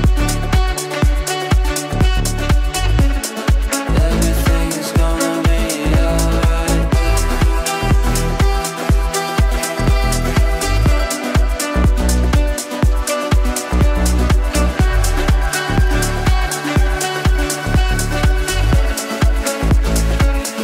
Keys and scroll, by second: 11.0 ctrl+z, 11.8 ctrl+z.